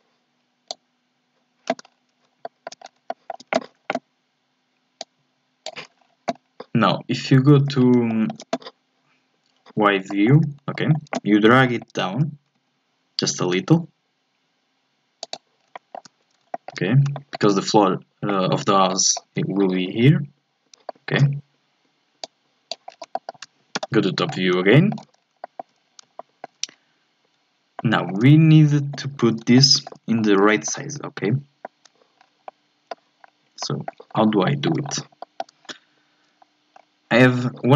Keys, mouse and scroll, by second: 1.8 scroll up 1, 2.4 shift+middle click, 2.8 scroll up 2, 3.1-5.0 shift+middle drag, 5.0 click, 5.9-6.3 scroll down 1, 6.3-7.2 scroll up 2, 7.2 KP_1, 7.7-8.1 scroll up 3, 8.1-10.7 shift+middle drag, 10.7-11.5 scroll up 1, 11.5 scroll up 1, 11.6 shift+middle click, 12.2 g, 15.6 scroll down 1, 15.7 shift+middle click, 16.2-16.5 scroll up 2, 16.5-22.2 shift+middle drag, 22.2 click, 22.9 scroll down 3, 23.1 shift+middle click, 23.7 KP_7, 24.3 scroll up 1, 24.7 shift+middle click, 25.1 scroll down 2, 25.4 shift+middle click, 25.8-26.2 scroll up 1, 26.2 shift+middle click, 26.7-27.8 scroll up 1, 27.8-28.9 shift+middle drag, 28.9-29.5 scroll up 2, 29.5 shift+middle click, 30.1-30.6 scroll up 2, 30.6-32.2 shift+middle drag, 32.2 scroll down 1, 32.5 shift+middle click, 33.2-33.6 scroll up 1, 33.6 shift+middle click, 34.1 scroll up 2, 34.4 shift+middle click, 35.2 shift+middle click, 35.6-36.4 scroll down 1, 36.4-36.7 scroll down 3, 36.7 scroll up 4.